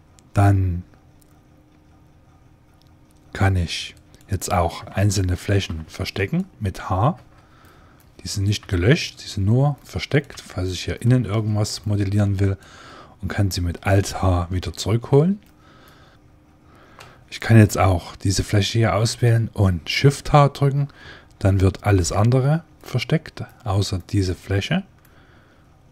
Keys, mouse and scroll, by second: 3.8-5.4 right drag, 5.0 ctrl+Tab, 5.5-7.0 right drag, 7.0 h, 8.5 h, 10.2 h, 12.3-14.1 right drag, 14.6 alt+h, 15.7 click, 17.5-19.9 right drag, 20.5 shift+h, 22.7-25.6 middle drag.